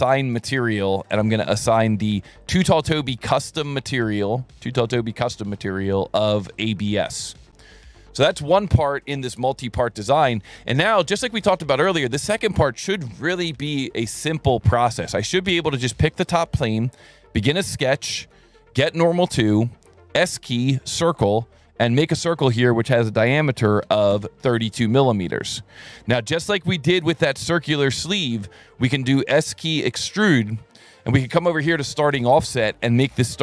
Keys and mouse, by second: 0.1 click, 1.7 click, 2.4 click, 3.0 click, 4.0 click, 4.6 click, 5.2 click, 6.6 click, 7.6 click, 15.9 click, 16.8 s, 17.6 click, 18.3 n, 19.4 s, 20.4 click, 21.5 click, 22.4 click, 23.7 KP_3, 23.9 KP_2, 24.1 KP_Enter, 29.2 s, 29.9 click, 31.6 click, 32.3 click.